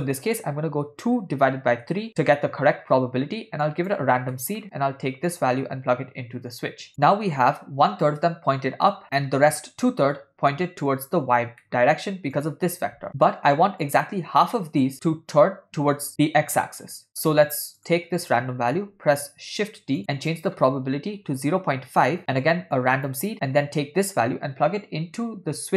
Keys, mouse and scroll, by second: 3.7 click, 4.3 middle click, 5.4-6.9 drag, 11.6 middle click, 12.4 click, 13.1 ctrl+middle click, 17.1 middle click, 17.8 click, 19.0 shift+d, 20.4-22.1 drag, 22.8 click, 24.2 click, 24.7-25.7 drag.